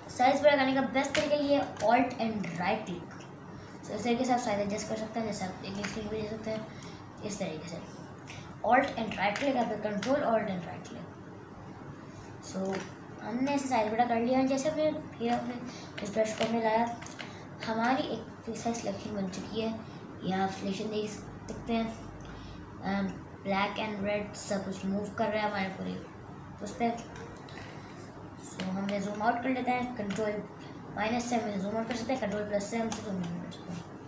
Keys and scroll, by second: 15.5 ctrl+KP_Add, 16.0 ctrl+KP_Add, 17.2 super+KP_Add, 28.7 super+KP_Subtract, 29.0 super+KP_Subtract, 30.3 ctrl+KP_Subtract, 32.0 ctrl+KP_Add.